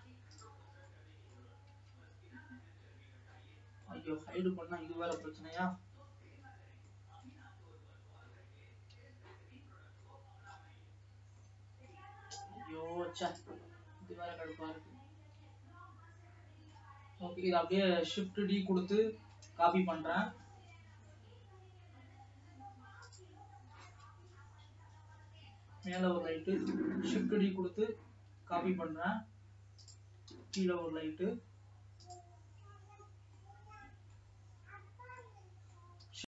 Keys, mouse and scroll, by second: 0.2-0.8 scroll up 1, 0.8 click, 1.0-2.4 middle drag, 2.4 Tab, 3.0-3.4 scroll up 2, 3.4 scroll down 2, 4.4-5.5 shift+middle drag, 5.5 KP_3, 7.1 shift+middle click, 7.8-8.5 shift+scroll up 6, 8.8-9.5 scroll up 3, 9.5 Tab, 10.3 middle click, 11.1 scroll up 4, 11.7 middle click, 12.5 scroll down 2, 13.5 click, 14.8-17.2 middle drag, 17.2 scroll down 2, 18.1-20.1 middle drag, 20.1 shift+d, 24.2 g, 27.0 shift+d, 30.6 g, 32.8 scroll down 2, 33.7 middle click, 34.6 scroll down 2, 35.4 middle click.